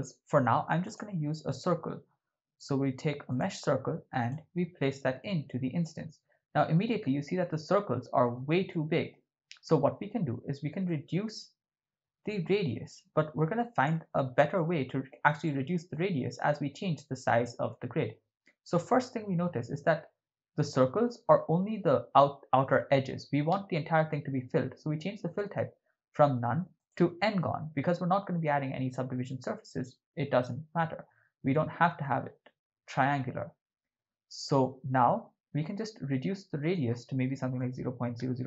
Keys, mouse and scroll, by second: 5.3-5.8 drag, 7.0-8.5 ctrl+middle drag, 8.8-9.1 shift+middle drag, 10.9-13.8 drag, 14.4-15.2 ctrl+middle drag, 15.4-15.9 shift+middle drag, 25.2-27.0 drag, 36.6-38.4 drag, 37.9 0.